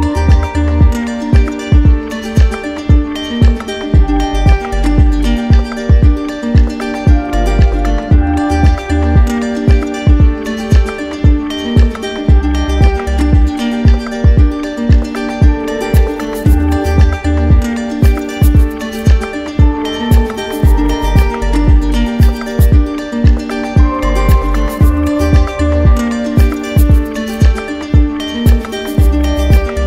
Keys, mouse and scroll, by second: 1.8 ctrl+click, 2.3 alt+right click, 4.3 click, 4.5 ctrl+z, 6.7 ctrl+click, 9.9 click, 11.6 click, 13.5 alt+click, 13.6 alt+click, 15.0 alt+right click, 17.0 alt+right click, 22.8 alt+right click, 24.0 alt+click, 26.9 click, 27.4 shift+click, 28.0 alt+right click, 28.7 right click.